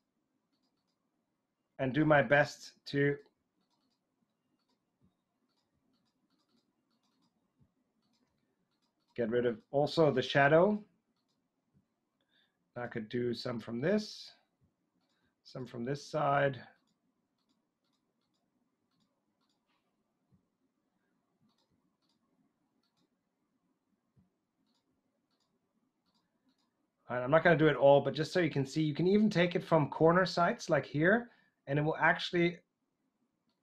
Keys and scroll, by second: 5.0 typing, 7.5 typing, 14.6 typing.